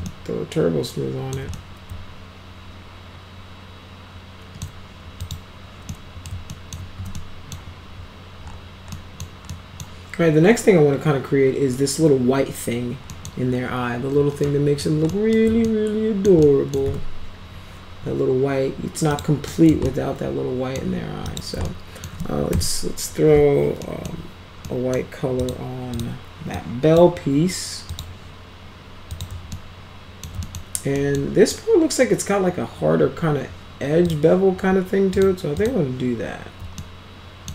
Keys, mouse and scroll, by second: 0.1-1.4 alt+middle drag, 1.6-4.7 middle drag, 5.2 click, 5.9 middle click, 6.5 alt+middle click, 7.0 z, 7.2 middle click, 9.0 middle click, 9.5 middle click, 13.1 middle drag, 14.5-14.8 middle drag, 15.2 middle click, 15.7 alt+middle click, 16.5 alt+middle click, 16.9 z, 19.1 click, 19.5 middle click, 19.7 alt+scroll up 1, 19.9 alt+middle click, 21.0 scroll down 2, 21.3 click, 21.7 alt+middle click, 22.6 m, 23.8 middle click, 24.7 middle click, 25.4 click, 26.0 click, 26.6-27.0 drag, 27.9 click, 29.1 click, 29.5-30.3 alt+middle drag, 30.4 middle click, 31.0 middle click, 34.1 click, 35.2 click, 35.6 click, 36.8-37.5 alt+middle drag.